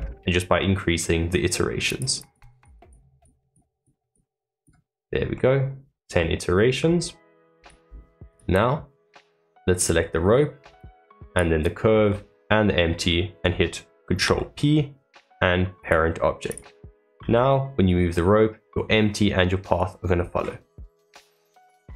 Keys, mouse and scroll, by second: 1.8-4.9 drag, 4.9 scroll down 1, 5.3-7.5 middle drag, 7.5 click, 8.2 click, 9.0-10.0 scroll up 1, 10.0-10.7 middle drag, 10.7 shift+click, 16.4 click, 17.1 g, 20.2 scroll up 2.